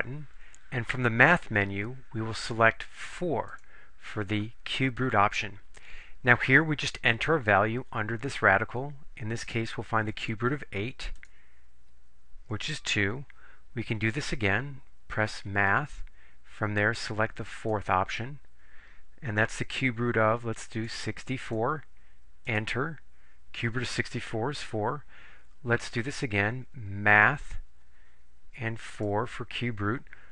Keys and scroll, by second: 3.6 4, 10.2 8, 11.3 Return, 17.7 4, 20.8 6, 21.5 4, 22.5 Return, 29.0 4.